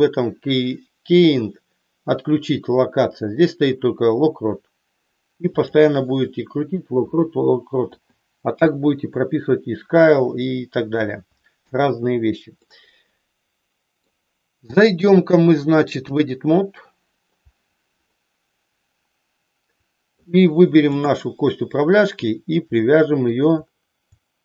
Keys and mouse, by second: 7.7 i, 11.5 KP_1, 12.6-14.1 middle drag, 15.0-16.3 drag, 16.9 middle click, 18.1-20.3 middle drag, 20.9 click, 22.7 middle click.